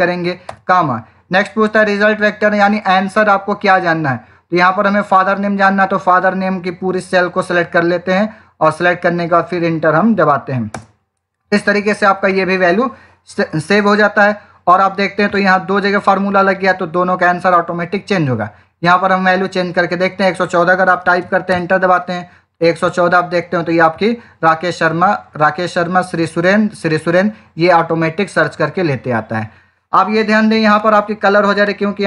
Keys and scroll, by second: 10.6 Return, 20.8 1, 21.1 4, 21.4 Return.